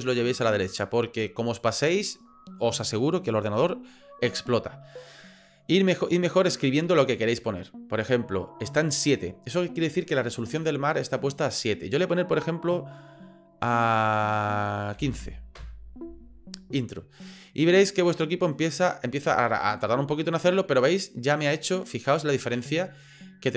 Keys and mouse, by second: 6.4-17.5 drag.